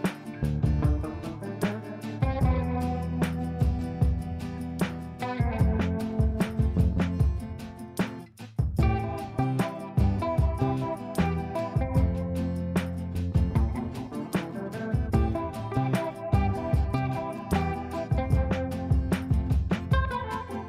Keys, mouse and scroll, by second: 2.0 space, 3.1 click, 3.9 F3, 4.1 F2, 4.4-8.3 drag, 8.3-11.8 shift+drag, 11.8-19.3 shift+drag, 19.3 space.